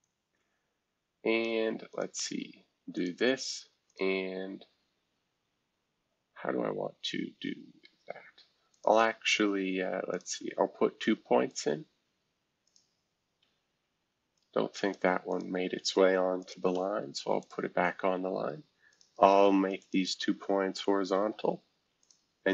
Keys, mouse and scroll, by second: 0.0-1.4 drag, 1.9 click, 2.9 shift+click, 3.9 click, 4.7-5.2 scroll down 3, 5.8 scroll up 2, 6.8 scroll down 2, 7.2-8.6 scroll up 8, 8.6 scroll up 1, 8.7 click, 10.1-11.6 drag, 12.6 click, 13.4 Escape, 14.3 click, 15.3 click, 16.4 shift+click, 17.4-21.2 drag, 21.2 h, 22.0-22.5 drag, 22.4-22.5 typing.